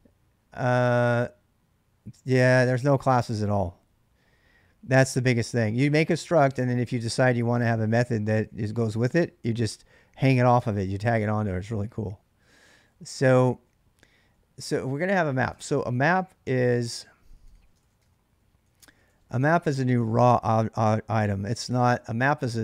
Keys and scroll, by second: 1.9 typing, 12.7 ctrl+[, 12.8 ctrl+j, 12.8-21.2 typing, 15.3 ctrl+[, 15.4 ctrl+h.